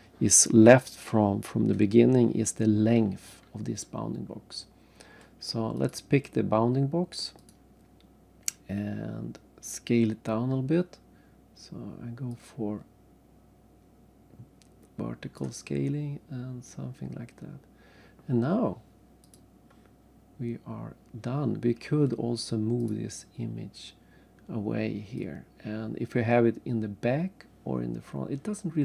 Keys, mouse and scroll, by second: 5.8 click, 7.5 click, 8.4 scroll up 2, 8.8-9.3 scroll down 2, 10.4 scroll up 1, 10.7-11.6 scroll down 1, 12.3 click, 15.8-17.0 scroll up 1, 17.0 scroll up 2, 17.5 scroll down 3, 19.2 click, 20.3 scroll up 1, 22.8 click, 25.2 click.